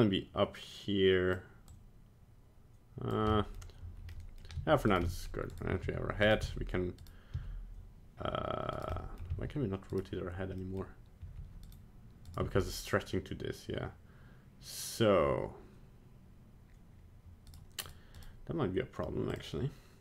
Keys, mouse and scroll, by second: 1.7 click, 3.3 middle click, 4.1 middle click, 4.6 g, 5.1 middle click, 5.3 middle click, 5.6 right click, 5.9 g, 6.5 r, 7.4 r, 9.0 middle click, 9.4 r, 10.6 middle click, 11.3 r, 12.3 right click, 12.5 g, 17.9 right click, 18.2 right click, 19.3 click.